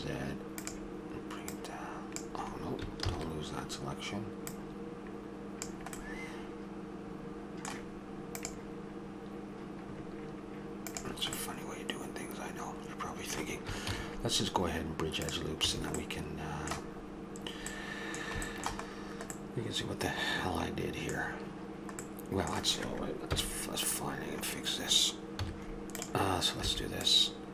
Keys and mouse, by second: 1.5-2.5 drag, 3.0 ctrl+z, 6.0 middle click, 11.7 middle click, 13.9 ctrl+e, 15.7 a, 21.2-23.3 middle drag, 23.3 KP_1, 25.4 z, 26.7 b.